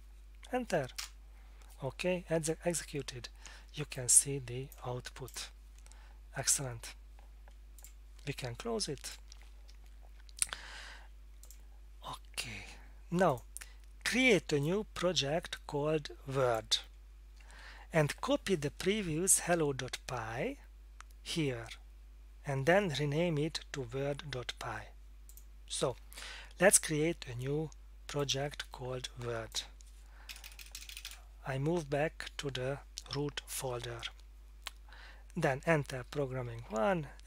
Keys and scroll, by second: 1.0 Return, 30.3-30.9 typing, 36.1 Return, 36.7 Down.